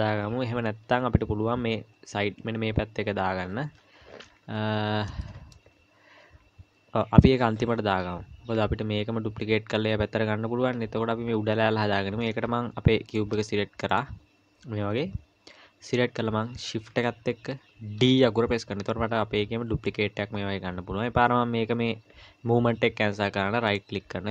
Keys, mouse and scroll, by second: 0.5 KP_1, 4.3-5.1 scroll up 2, 5.1 scroll up 1, 5.2 shift+middle click, 6.4-6.9 scroll down 1, 11.8-12.2 scroll up 1, 12.2-13.1 scroll down 2, 13.1 click, 13.9 click, 18.0 shift+d.